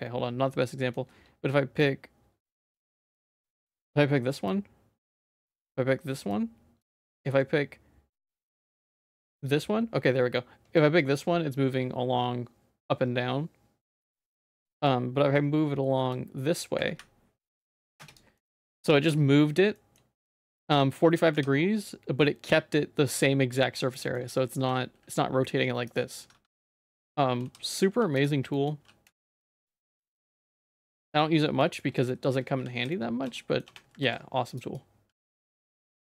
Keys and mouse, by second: 0.5 middle click, 1.8 click, 2.6 middle click, 2.9 ctrl+z, 3.5 shift+middle click, 4.5 click, 5.3 ctrl+z, 6.3 click, 7.1 ctrl+z, 9.1-14.0 drag, 14.4 ctrl+z, 14.8 middle click, 16.1-18.0 drag, 18.3 middle click, 18.7 shift+middle click, 19.7 shift+middle click, 21.3 w, 24.0 shift+middle click, 24.6 r, 26.3 1, 26.5 2, 27.4 g, 28.5 shift+middle click, 28.8 e, 30.4 middle click, 30.7 Tab, 30.9 z, 31.2 middle click, 31.8 middle click, 32.1 shift+middle click, 32.6 ctrl+s, 32.9 middle click, 33.4 middle click, 34.0 ctrl+r, 35.3 ctrl+r.